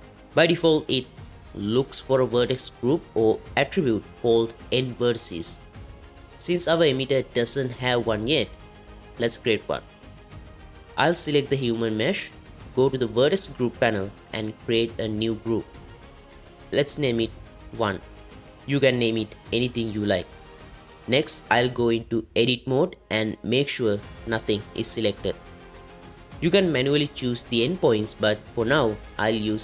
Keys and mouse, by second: 11.4 click, 13.8 click, 15.2 click, 17.5-18.9 drag, 19.5 click, 21.1 Tab, 22.6 Tab, 24.0 alt+a.